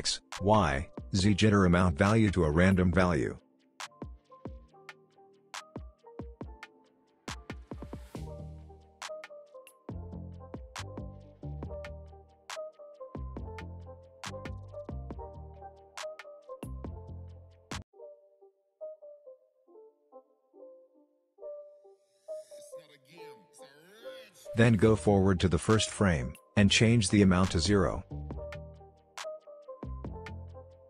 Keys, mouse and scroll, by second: 4.8-5.6 drag, 14.5 space, 16.8-19.3 drag, 25.2-25.8 click, 27.5 Return, 28.1 click, 29.0 Return, 29.5 click, 30.1 Return.